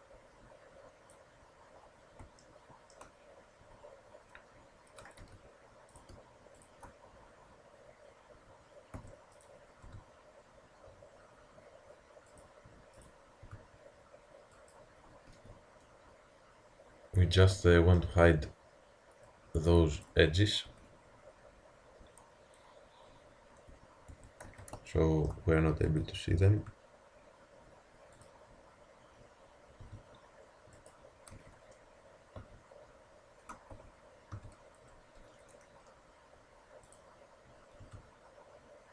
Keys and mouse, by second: 1.8-4.4 middle drag, 5.2 z, 5.9-8.5 drag, 9.0 a, 9.4-11.4 drag, 9.9 g, 13.0-14.9 drag, 13.5 g, 15.3 z, 17.7-20.4 middle drag, 20.7 Tab, 22.1 Tab, 23.7 Tab, 24.2 Tab, 24.5 z, 25.9-27.6 drag, 26.6 g, 29.9 g, 31.4 z, 32.4 a, 33.8 z, 34.4 v, 36.9-38.9 drag, 37.9 g.